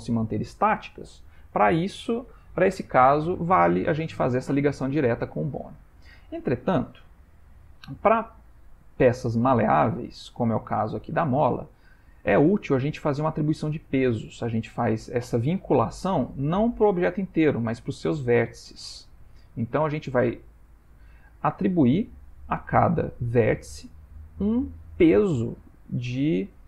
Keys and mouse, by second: 2.8 middle click, 5.1 ctrl+middle click, 6.1 shift+middle click, 6.7 ctrl+middle click, 7.3 ctrl+middle click, 7.6 shift+middle click, 8.0 click, 8.6 g, 11.7 ctrl+middle click, 12.3 middle click, 14.4 ctrl+middle click, 17.4 Tab, 18.9 Tab, 22.2 middle click, 23.2 middle click.